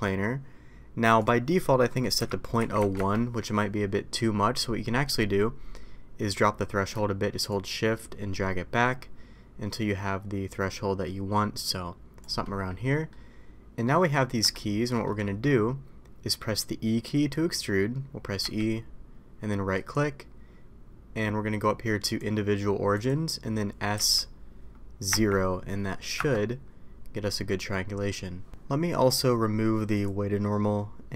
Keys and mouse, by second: 1.4-6.9 drag, 12.9 middle click, 13.8 middle click, 14.5-15.0 shift+middle drag, 18.5 e, 23.9 s, 27.4 middle click.